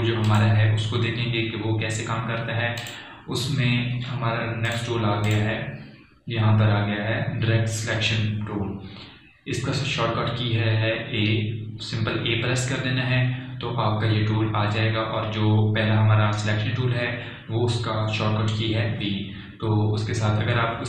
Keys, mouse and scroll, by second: 0.8 click, 4.1 click.